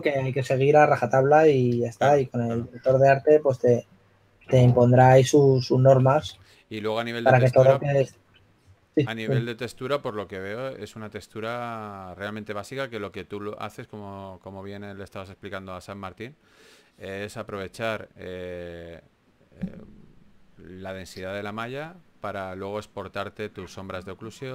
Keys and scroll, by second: 2.9-3.9 typing, 7.1 4, 8.7 4, 11.2-12.0 typing, 13.9-15.6 typing, 17.1 typing.